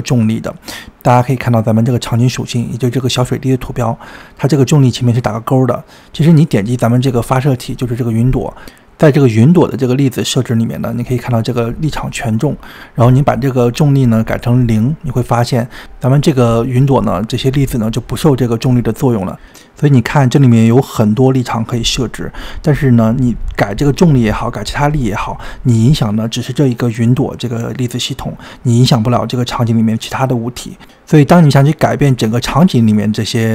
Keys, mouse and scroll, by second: 0.0 click, 3.3 click, 5.8 click, 6.4-8.7 scroll down 11, 8.7-9.2 scroll up 2, 9.2-10.3 scroll up 3, 10.3-18.1 drag, 28.4-31.4 drag, 32.8 click.